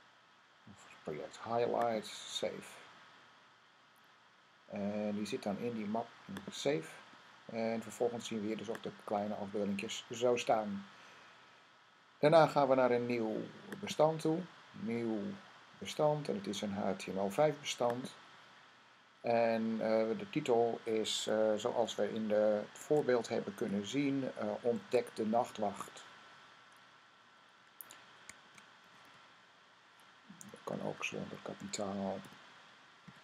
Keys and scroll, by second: 22.6 Tab, 24.6 super+Tab, 28.0-30.8 typing, 31.8-33.2 typing.